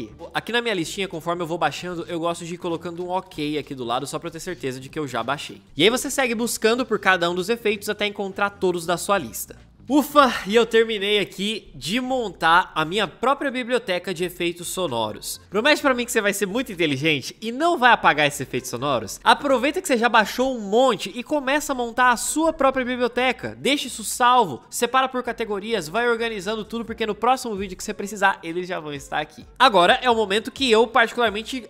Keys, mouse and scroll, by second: 2.4-3.4 typing, 5.0-6.1 typing.